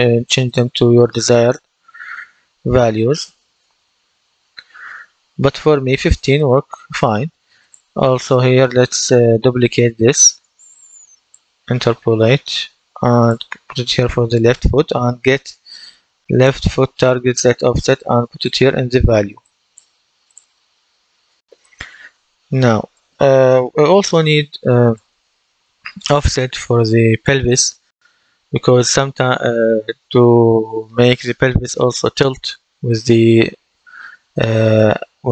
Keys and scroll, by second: 9.6 ctrl+d.